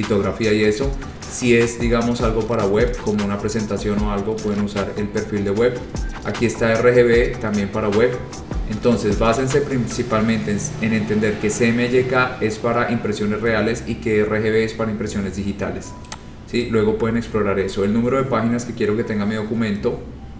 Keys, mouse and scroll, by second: 16.3 click.